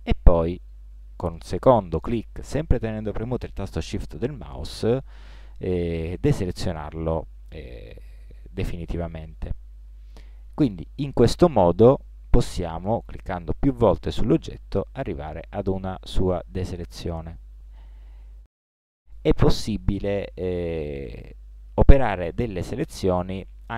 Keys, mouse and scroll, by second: 0.5 right click, 10.4-13.5 right drag.